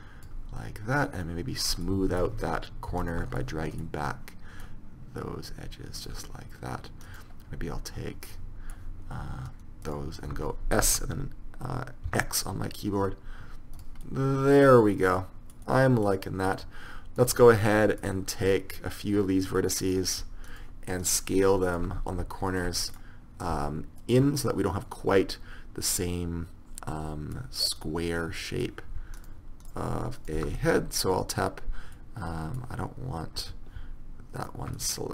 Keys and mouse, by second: 1.2-3.0 right drag, 3.0 middle click, 3.7 middle click, 4.8 middle click, 5.1-6.2 drag, 7.2-9.2 right drag, 10.0-11.8 right drag, 11.0 s, 15.0 middle click, 15.2 middle click, 15.7 middle click, 15.9 middle click, 17.3 click, 18.0 click, 18.6 middle click, 18.8-20.0 middle drag, 20.0-25.0 right drag, 25.0-26.8 middle drag, 27.9-29.7 middle drag, 29.7 click, 29.9-32.2 right drag, 32.2-33.9 middle drag, 34.5-35.1 middle drag.